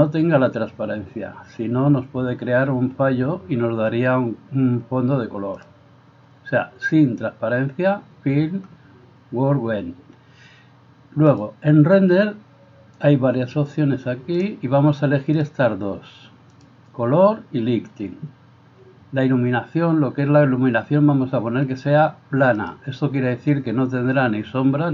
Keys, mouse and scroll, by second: 13.8-22.7 drag.